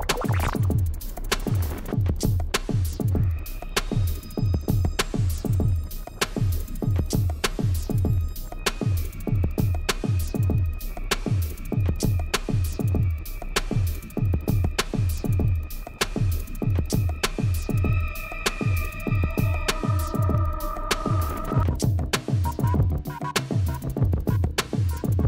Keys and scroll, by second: 2.0 Right, 4.6 shift+Left, 4.7 Down, 5.0 Up, 5.1 Right, 5.2 Left, 5.3 Down, 5.5 Up, 5.8 Right, 6.0 Left, 6.1 Right, 6.2 Left, 7.3 Right, 7.4 Left, 10.1 Left, 10.3 Right, 12.0 ctrl+z, 12.5 ctrl+z, 17.0 Right, 17.2 Left, 17.3 Right, 17.4 Left, 17.5 Right, 17.7 Left, 23.6 Escape.